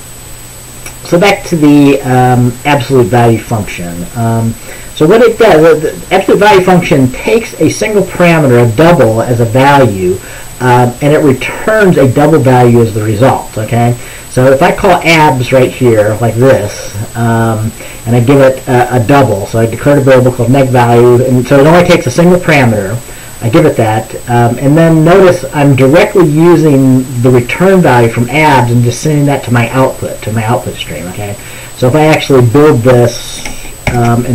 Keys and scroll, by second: 34.0 ctrl+b.